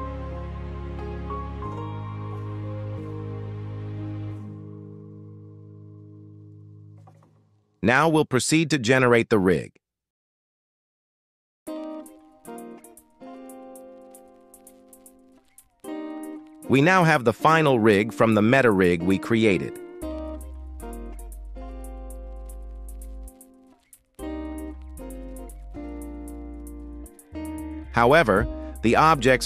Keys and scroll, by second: 0.0 ctrl+alt+s, 21.1 ctrl+Tab, 28.4 g, 28.8 y.